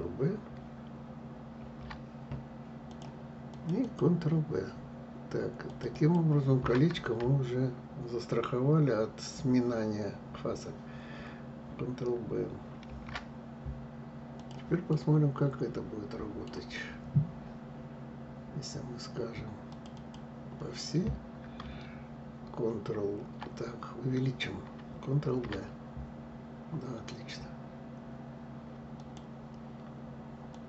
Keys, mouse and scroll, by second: 1.3 ctrl+b, 3.2 click, 3.5 click, 5.4 click, 5.6 click, 12.6 ctrl+b, 14.6-17.5 middle drag, 19.4 click, 19.6 click, 23.2-25.0 scroll up 2, 25.0 ctrl+b, 30.2 click, 30.5 click.